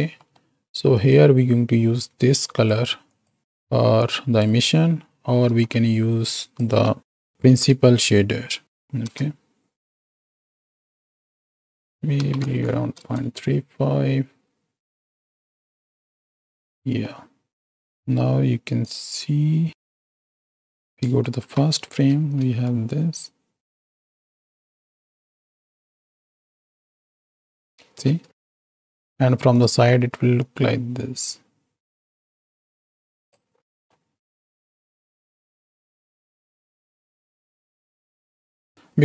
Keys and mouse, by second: 0.3 middle drag, 1.3-3.0 drag, 3.1 click, 3.4 x, 3.9-4.4 drag, 5.7 ctrl+x, 6.3-9.7 drag, 10.1-11.0 drag, 11.2 click, 11.5-13.7 drag, 14.8 middle click, 15.7 shift+middle click, 16.1-17.0 middle drag, 17.8 middle drag, 19.0 click, 20.0 z, 21.4 shift+Left, 22.2 space, 28.5 space, 30.4-33.3 drag, 34.0-34.4 middle drag, 35.2-38.7 drag, 38.7 KP_7.